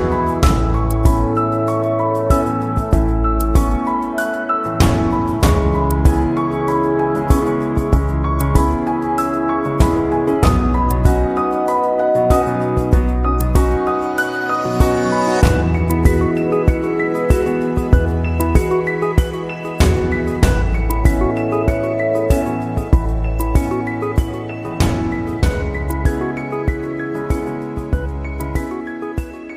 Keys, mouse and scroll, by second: 0.0 Escape, 2.6 click, 5.8 click, 8.5 click, 9.6 click, 24.8 click.